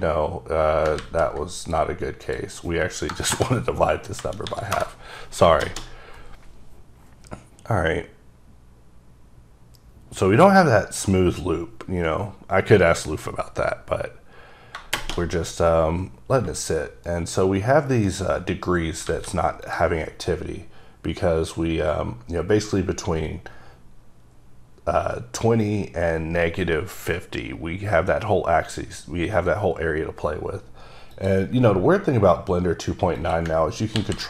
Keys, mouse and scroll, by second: 1.0 ctrl+z, 1.6 click, 2.2 click, 3.1 BackSpace, 3.3 BackSpace, 4.2 KP_0, 4.5 KP_7, 4.7 KP_Enter, 5.6 shift+middle click, 17.0 right click, 19.1 alt+a, 19.6 click, 31.1 click, 33.4 click, 33.9 ctrl+c.